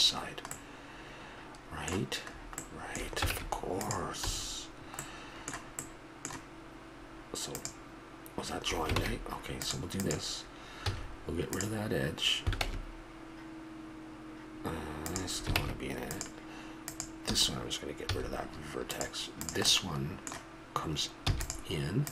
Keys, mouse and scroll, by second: 0.8-4.3 middle drag, 3.4 ctrl+Tab, 4.3 a, 5.0 middle click, 9.0 ctrl+Tab, 10.9 x, 12.7 Tab, 15.6 ctrl+Tab, 18.1 x, 19.4 middle click, 19.8 middle click, 21.3 e.